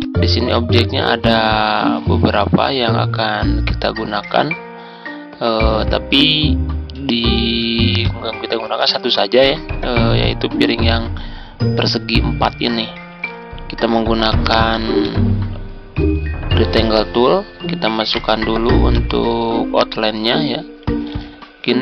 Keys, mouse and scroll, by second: 7.9 click, 8.9 z, 9.3-16.7 drag, 18.1 right click, 18.8 click, 21.0 Home.